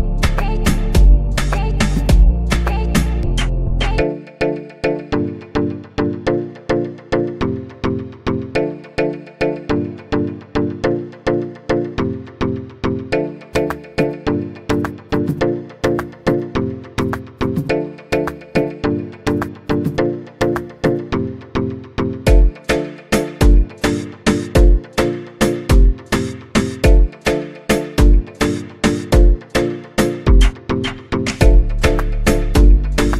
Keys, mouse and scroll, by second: 1.5 shift+d, 9.9 click, 11.5-12.8 scroll down 4, 12.8-13.4 drag, 13.4-14.3 scroll down 1, 14.3-15.6 scroll down 4, 15.6-18.7 drag, 20.1-23.1 drag, 23.1-23.7 scroll up 3, 23.7-25.6 scroll up 6, 25.6 space.